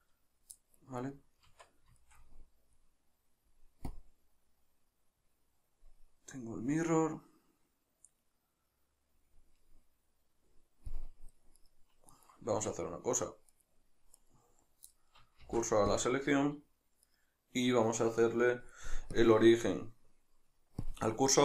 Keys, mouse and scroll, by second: 1.0 right click, 1.5 Tab, 2.0-4.0 shift+middle drag, 4.0 click, 4.6-11.6 middle drag, 11.6 right click, 12.2 right click, 12.5 Tab, 13.6 right click, 14.2 right click, 15.0-17.1 middle drag, 15.4 shift+s, 17.1 right click, 19.2-21.4 drag.